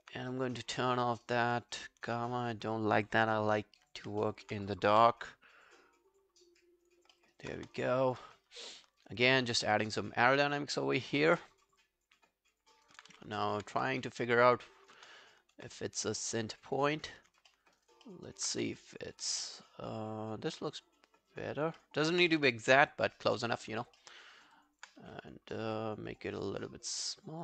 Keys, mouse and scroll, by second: 1.1 alt+middle click, 1.3 alt+right click, 1.6 alt+middle click, 1.8 alt+right click, 4.2 alt+middle click, 7.0 r, 7.2 alt+middle click, 7.4 alt+right click, 7.6 space, 8.3 space, 9.0 alt+click, 9.5 alt+right click, 9.8 alt+middle click, 10.1 alt+scroll up 1, 10.4 alt+middle click, 10.6 alt+right click, 10.8 alt+click, 11.2 alt+middle click, 11.5 alt+right click, 11.7 alt+click, 12.8 alt+right click, 13.1 w, 13.5 alt+middle click, 13.8 space, 15.0 space, 16.2 space, 16.8-17.2 scroll up 10, 17.5 alt+middle click, 17.8 alt+right click, 18.1 alt+middle click, 18.3 alt+right click, 18.6 w, 21.8 alt+middle click, 22.0 alt+right click, 22.4 space, 23.4 space, 24.0 alt+middle click, 24.4 alt+scroll down 1, 24.6 alt+click, 25.0 r.